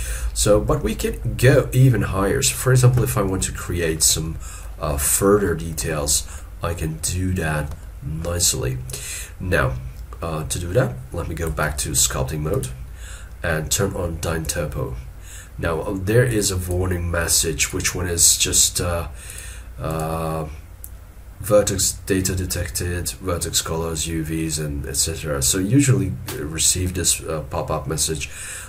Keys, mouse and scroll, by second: 2.1-2.8 scroll up 1, 5.2 shift+middle click, 5.5 shift+scroll down 1, 6.0 shift+middle click, 7.1-7.7 scroll up 1, 7.8 shift+middle click, 11.5 ctrl+Tab.